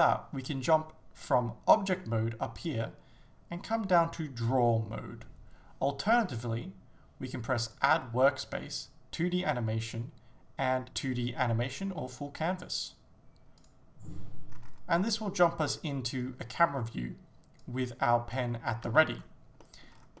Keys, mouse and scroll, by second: 2.6-8.9 drag, 14.6-15.0 scroll down 2, 15.0-17.7 scroll up 1, 17.7-19.7 drag, 18.9 ctrl+z, 19.7-20.2 middle drag, 19.9 scroll down 1.